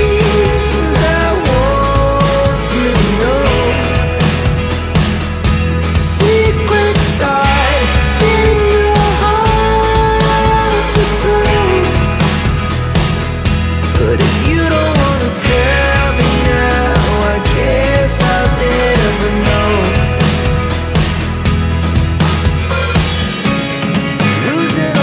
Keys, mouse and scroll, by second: 2.0 click, 6.2 click, 9.7 shift+click, 11.0 shift+click, 16.9 ctrl+e, 20.0 click, 24.1 click.